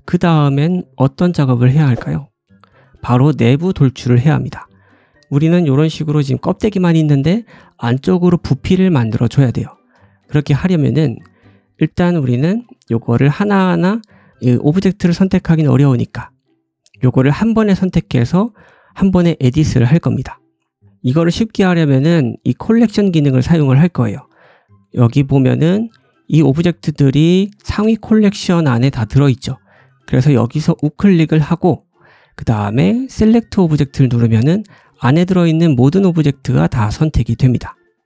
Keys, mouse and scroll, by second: 1.0 click, 1.1-3.1 middle drag, 1.3 right click, 1.7 g, 3.0 click, 3.0-22.2 right drag, 4.3 middle click, 5.1-5.5 scroll up 1, 5.5 click, 5.5 middle click, 10.1 shift+middle click, 10.6 middle click, 11.2 middle click, 11.8 click, 12.2 middle click, 12.6 click, 13.0 click, 13.3 click, 14.0 middle click, 15.6 middle click, 20.8 middle click, 21.3 scroll down 1, 21.4 shift+middle click, 22.3 shift+middle click, 25.8 click, 26.4 scroll down 1, 26.8 shift+click, 27.1-28.8 scroll up 3, 28.8-29.4 scroll up 1, 29.6 click, 29.6 middle click, 29.6 right click, 30.5-38.0 right drag, 35.2-36.1 scroll down 3, 36.1 scroll down 3, 36.3-37.3 scroll up 7, 37.9 middle click.